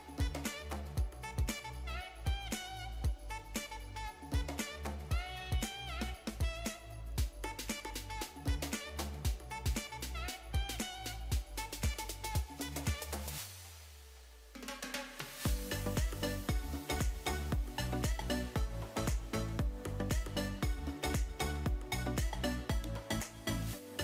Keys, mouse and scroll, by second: 4.6 ctrl+r, 7.2 click, 8.2 middle click, 8.8 ctrl+r, 10.7 click, 12.1 ctrl+r, 12.7 click, 13.5 ctrl+r, 16.0 ctrl+z, 17.0 ctrl+r, 17.8 click, 18.3 middle click, 19.2 ctrl+r, 19.9 click, 20.7 ctrl+r, 21.2 click, 21.9 Tab, 22.5-23.2 middle drag.